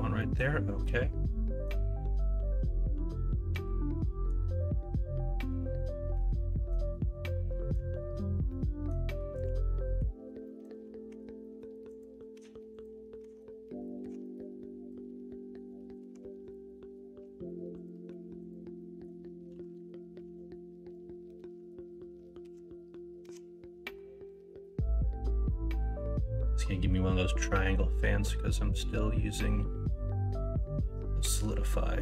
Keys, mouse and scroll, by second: 0.2 middle click, 0.8 middle click, 8.6 middle click, 9.7 middle click, 10.4 middle click, 11.0 Tab, 11.4 middle click, 12.3 Tab, 13.2 Tab, 14.0 1, 14.2 middle click, 16.1 2, 18.0 1, 18.8 middle click, 19.5 KP_1, 19.7 KP_3, 20.2 alt+z, 22.4 ctrl+b.